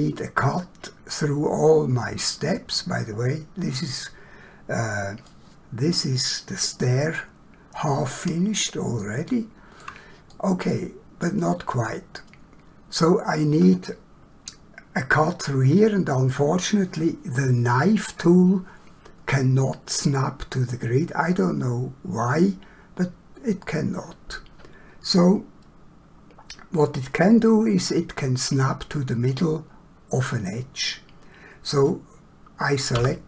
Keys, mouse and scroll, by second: 2.8 middle click, 9.0 shift+middle click, 10.3 middle click, 33.0 k.